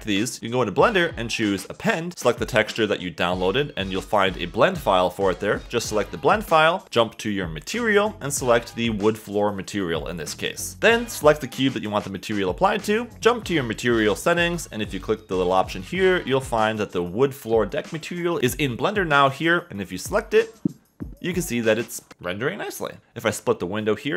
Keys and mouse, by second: 1.3-2.7 drag.